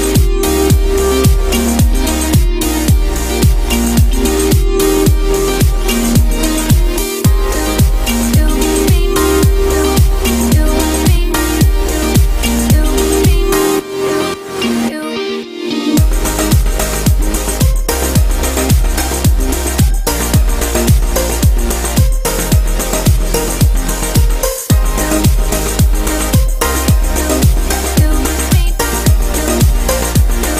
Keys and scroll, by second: 28.6 ctrl+g.